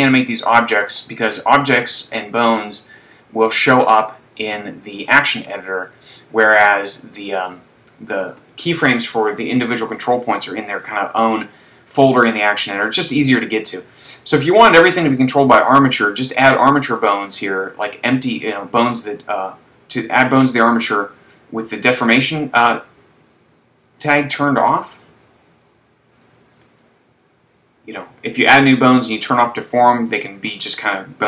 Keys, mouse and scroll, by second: 1.0 right click, 2.0 click, 24.8 right click, 26.1 click, 27.1-27.7 scroll down 5.